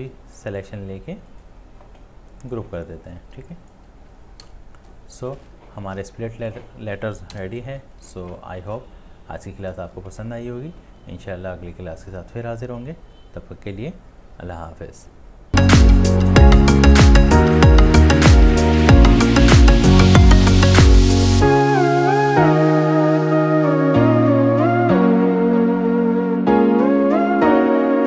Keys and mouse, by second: 1.3 right click, 8.0-9.6 space, 9.8 space, 9.9 space.